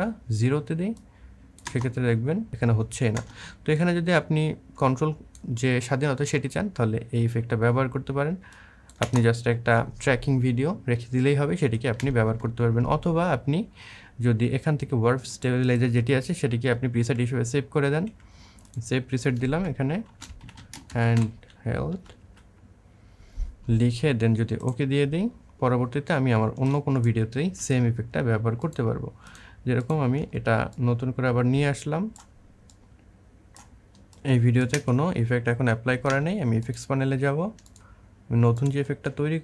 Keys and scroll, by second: 1.5 space, 3.0 space, 8.8 space, 11.8 space, 19.6-22.0 typing, 27.3 Delete, 30.0 Delete, 34.5 space.